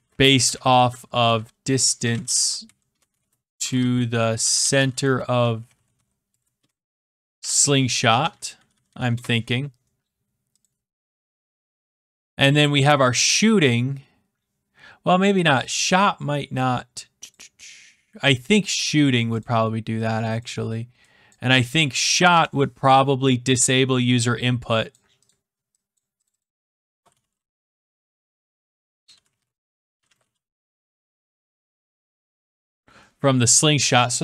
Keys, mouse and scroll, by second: 0.0-9.2 typing, 10.6 click, 11.1 e, 11.4 click, 12.5 click, 17.2 click, 18.6 click, 19.4 click, 22.3 Delete, 24.8 click, 25.3 click, 26.7-32.9 typing.